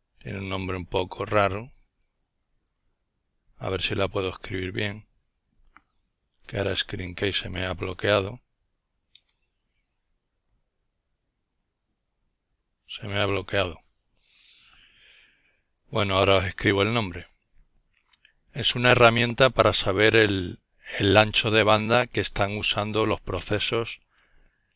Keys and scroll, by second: 0.0-0.1 typing.